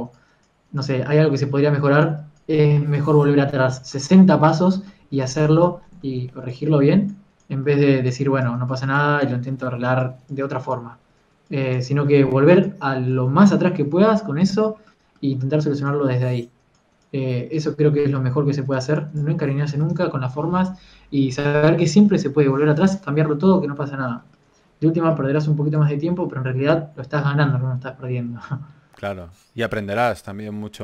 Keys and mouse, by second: 3.5 f, 5.8 f, 6.3 click, 6.8 ctrl+z, 7.0 f, 8.8 f, 11.9 f, 14.2 ctrl+z, 16.2 click, 16.7 f, 18.9 click, 20.4 a, 20.8 ctrl+s, 26.2-27.6 drag, 27.6 KP_1.